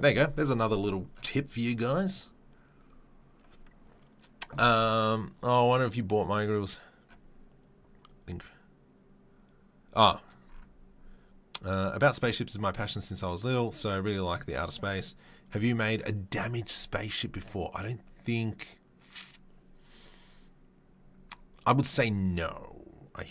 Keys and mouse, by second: 1.1-23.3 middle drag.